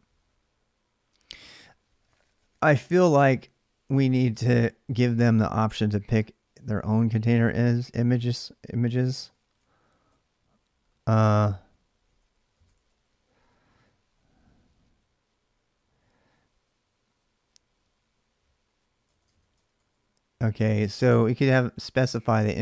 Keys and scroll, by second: 8.7-13.1 typing, 18.8-20.0 typing.